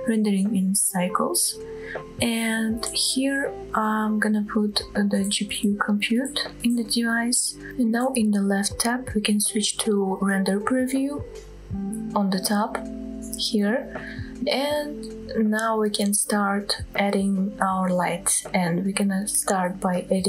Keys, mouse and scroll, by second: 1.4-3.4 drag, 9.9-12.4 scroll down 5, 14.0 drag, 15.4-16.2 scroll down 2, 16.2-16.7 scroll up 2, 16.7-17.2 scroll down 1, 17.2-18.3 middle drag, 18.4 scroll up 1, 19.1 click, 19.6 shift+a.